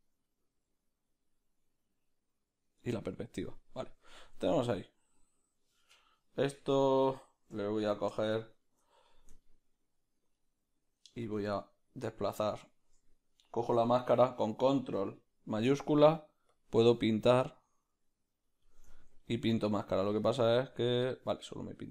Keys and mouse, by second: 6.2-8.1 right drag, 7.0-11.2 ctrl+middle drag, 8.1 b, 11.2 click, 11.5 click, 12.2-18.7 middle drag, 18.7 ctrl+shift+click, 19.3-21.9 middle drag.